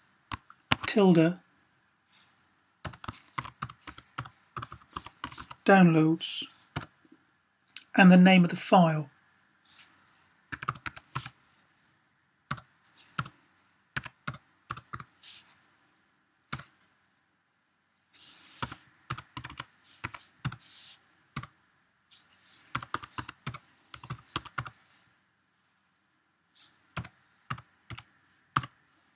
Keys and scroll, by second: 0.0-0.4 typing, 2.4-5.3 typing, 6.6 typing, 10.4-10.9 typing, 12.4-14.7 typing, 16.4 typing, 18.5-21.2 typing, 22.6-24.4 typing, 26.5-28.4 typing.